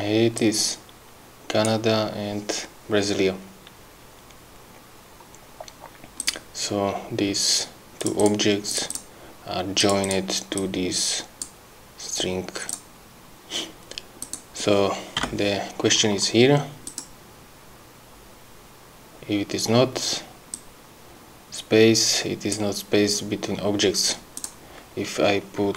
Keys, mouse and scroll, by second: 0.4-1.8 drag, 6.2 click, 8.0 click, 8.7 click, 9.8 click, 10.6 click, 14.2 click, 15.2 BackSpace, 16.9 click, 20.5-22.7 drag, 24.4 click.